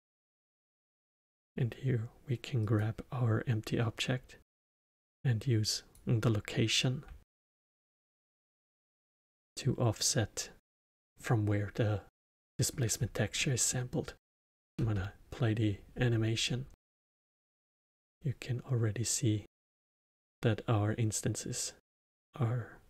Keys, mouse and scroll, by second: 1.3 click, 4.8 click, 7.2 alt+middle click, 7.8-8.4 scroll down 1, 8.4-11.9 alt+middle drag, 11.9-12.4 scroll up 1, 12.4-12.9 middle drag, 12.9-13.3 scroll down 1, 13.3-14.7 middle drag, 14.7 space.